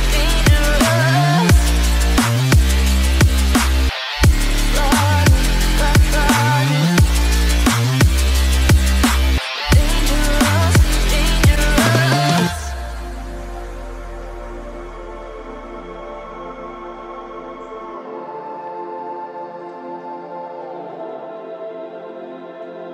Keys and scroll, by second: 6.3 ctrl+g, 15.0 Return.